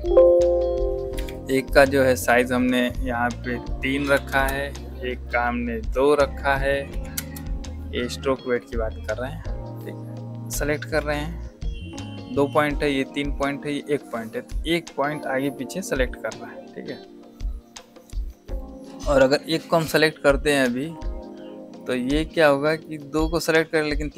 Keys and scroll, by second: 4.0 KP_3, 4.2 KP_Enter, 6.8 KP_2, 7.1 KP_Enter, 10.9 v.